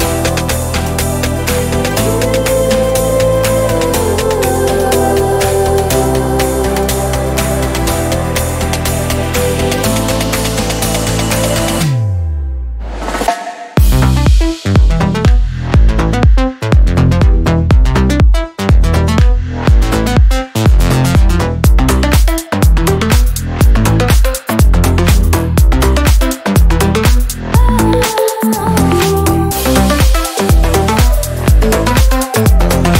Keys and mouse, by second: 1.0-3.4 drag, 5.4-11.0 drag, 11.1 shift+a, 12.8 click, 13.3 click, 13.9 click, 14.7 click, 16.0 g, 17.8 middle click, 18.2 ctrl+a, 21.8-25.0 drag, 25.6-28.4 middle drag, 28.4 s, 30.4 ., 31.4 s.